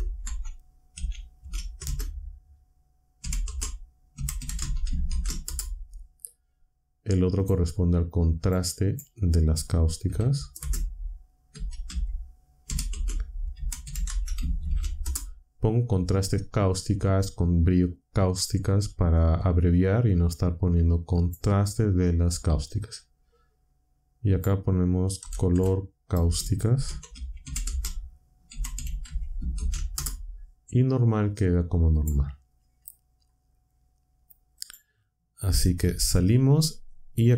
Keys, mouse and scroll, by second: 0.0-5.5 typing, 7.3 click, 7.4-8.1 typing, 8.4 click, 8.8 click, 10.0-15.0 typing, 21.1 click, 24.3 click, 25.2-30.0 typing, 31.9 click, 34.5 click, 35.8 Tab.